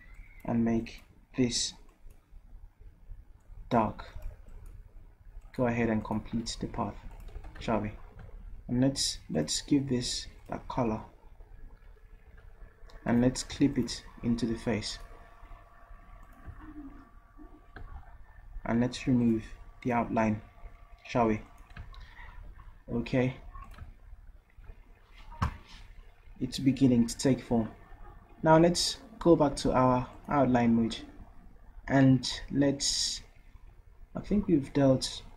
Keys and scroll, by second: 7.4 v, 12.3 v, 23.5 v.